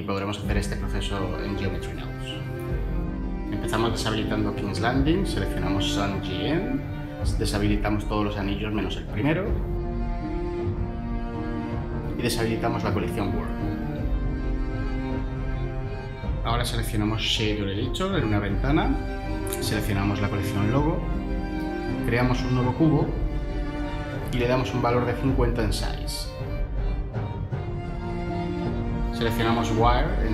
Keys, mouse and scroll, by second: 21.3 shift+a, 25.2-25.6 typing.